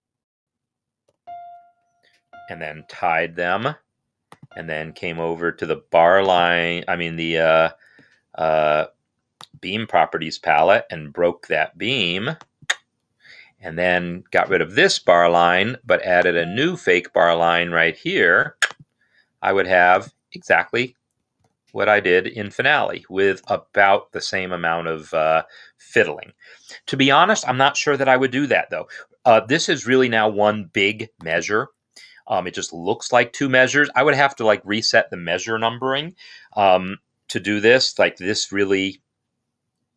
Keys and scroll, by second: 1.5 Escape, 1.5 f, 1.9 Left, 2.7 shift+=, 15.0 BackSpace, 29.2 Escape.